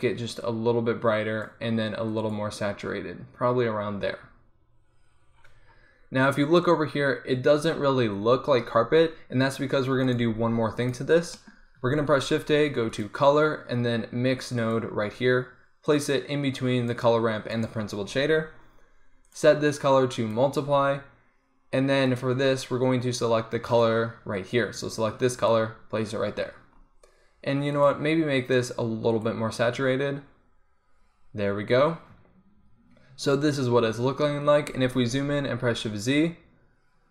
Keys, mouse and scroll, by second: 5.5-10.2 middle drag, 10.2-12.0 right drag, 10.3 g, 12.0 shift+a, 16.2 click, 17.0 right click, 19.3 middle click, 19.5-21.5 drag, 22.2-26.9 drag, 26.9 middle click, 27.8-32.2 drag, 35.5 shift+z.